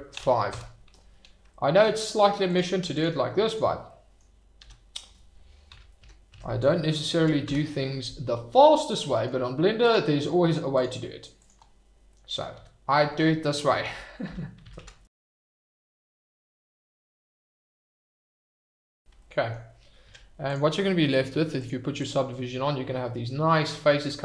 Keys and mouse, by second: 0.1 5, 0.5 Return, 1.6 middle click, 3.8-4.1 drag, 4.6 e, 5.7 -, 6.3 0, 7.1 5, 7.4 Return, 8.5 click, 12.1 middle drag, 12.5 e, 13.8 -, 14.6 0, 14.8 5, 15.1 Return, 15.4 middle click, 15.7 drag, 16.2 e, 16.6 -, 16.7 0, 16.8 5, 16.9 Return, 17.2 middle drag, 17.5 drag, 18.0 e, 18.5 -, 18.6 0, 18.7 5, 18.8 Return, 19.3 middle click, 20.0 Tab, 21.6 click, 22.4-23.5 middle drag, 23.8 shift+middle click.